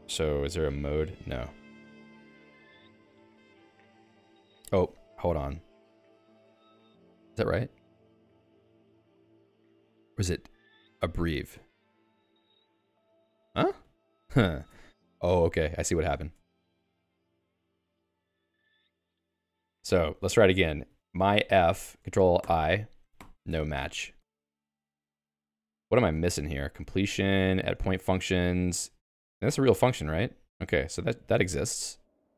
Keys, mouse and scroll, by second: 2.9 ctrl+g, 6.1 click, 9.6-11.1 typing, 12.0 ctrl+alt+x, 14.1 shift+g, 14.7 Escape, 14.8-15.8 k, 15.9 k, 16.2 ctrl+s, 17.0-21.8 typing, 17.6 Escape, 22.4 ctrl+alt+i, 23.2 ctrl+alt+i, 23.5 Escape, 23.7-25.0 typing, 26.5-29.8 typing, 29.9 Return, 31.3 q.